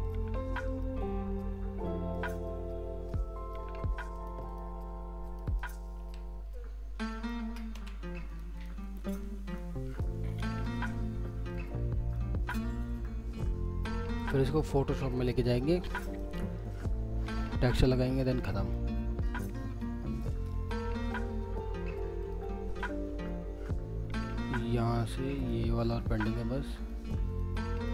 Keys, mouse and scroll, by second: 0.1 alt+middle click, 1.0 alt+scroll up 2, 1.3 alt+middle click, 2.3 alt+scroll up 1, 2.4 alt+middle click, 4.1 ctrl+click, 6.0 ctrl+z, 7.1 shift+click, 7.7 ctrl+z, 8.3 ctrl+click, 8.5 ctrl+double click, 9.4 ctrl+click, 9.9 ctrl+click, 10.3 middle click, 10.7 alt+middle click, 11.2 scroll down 1, 11.5 alt+middle click, 12.5 alt+scroll up 1, 12.5 alt+middle click, 13.2 alt+scroll up 2, 14.0 ctrl+click, 16.3 ctrl+scroll down 2, 16.7 alt+middle click, 18.5 alt+middle click, 18.9 scroll up 1, 19.2 alt+middle click, 22.2 ctrl+click, 22.8 middle click, 25.0 ctrl+click.